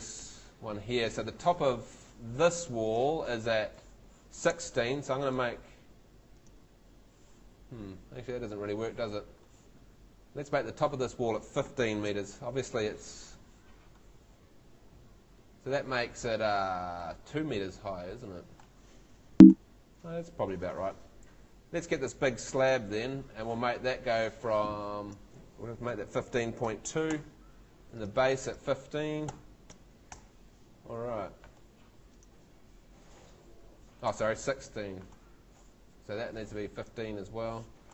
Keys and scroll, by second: 2.1 Escape, 11.6 |, 12.1 5, 19.3 Escape, 22.1 Tab, 25.6-27.6 typing, 29.3 |, 29.7 5, 30.1 Return.